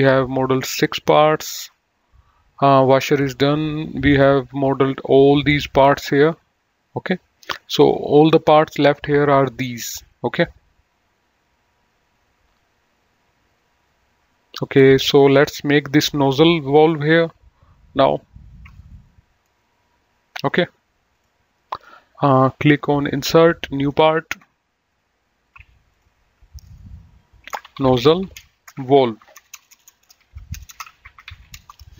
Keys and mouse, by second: 1.9 click, 3.1 click, 4.4 click, 5.8 click, 7.1 click, 21.4 click, 23.2 click, 26.1 click, 26.5 F2, 27.5-31.9 typing.